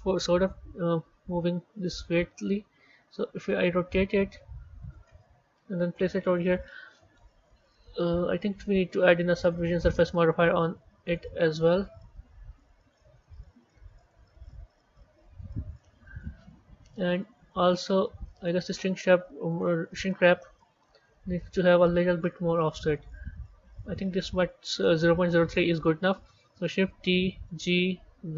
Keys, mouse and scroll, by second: 2.3 r, 5.4 KP_1, 6.1-9.3 scroll up 4, 9.3 click, 9.6-12.8 drag, 13.2 z, 17.7 click, 18.4 click, 19.5 click, 21.9 click, 24.2-25.2 scroll down 1, 25.2 scroll down 5, 27.1 shift+d.